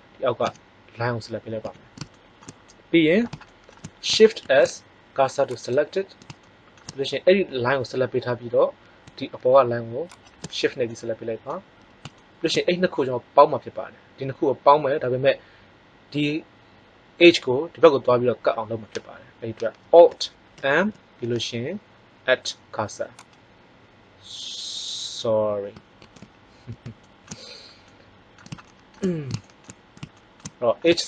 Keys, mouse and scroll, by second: 0.4 z, 1.6 z, 4.4 shift+s, 10.0 right click, 10.8 middle click, 20.5 alt+m, 25.9 ctrl+z, 30.7-31.0 middle drag.